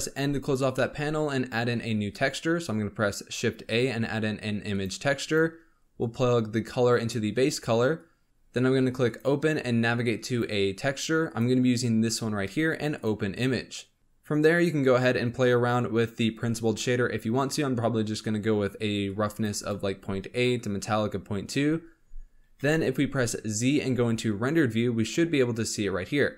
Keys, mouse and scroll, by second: 0.2 n, 0.7 middle click, 1.2 scroll up 4, 1.6 shift+a, 5.9-8.2 drag, 9.0-12.0 drag, 14.0 click, 14.7-19.6 drag, 21.8 scroll up 1, 22.5 z.